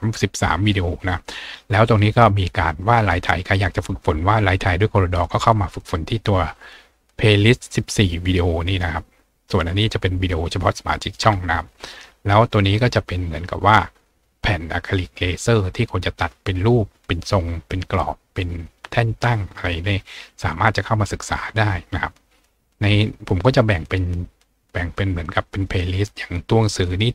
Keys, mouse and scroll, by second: 8.7-9.0 scroll down 2, 12.0 scroll down 2, 13.1 scroll up 2, 22.5-23.0 scroll down 2, 24.3-24.7 scroll down 2.